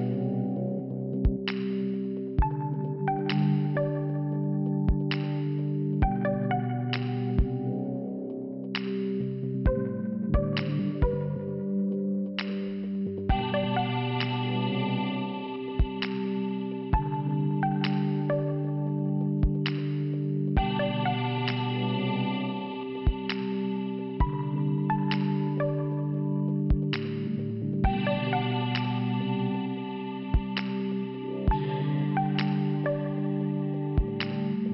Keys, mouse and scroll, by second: 1.4 shift+Return, 2.7 click, 4.3 click, 8.0 click, 9.2 click, 10.9 click, 11.6 click, 11.6 click, 12.5 click, 14.1 click, 16.3 click, 16.4 click, 17.3 click, 20.2 click, 21.3 click, 22.9 click, 23.0 click, 25.6 click, 26.9 click, 28.2 click, 29.6 click, 29.7 click, 30.2 scroll down 2, 31.7 click, 32.7 scroll down 1, 33.3 click.